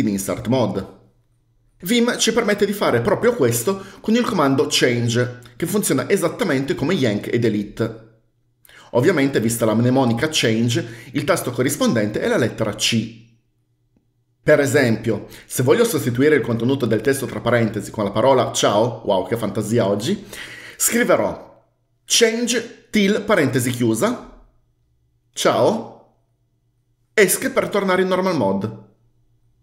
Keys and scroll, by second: 22.4-23.7 typing, 25.5-26.7 typing, 27.6 Escape.